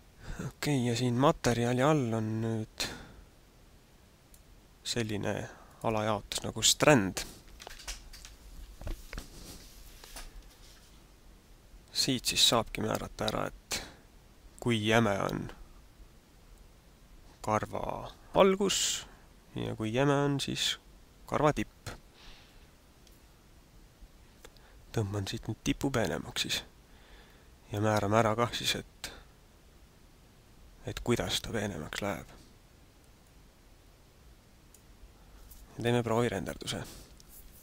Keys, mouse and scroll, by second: 5.6 click, 7.2 click.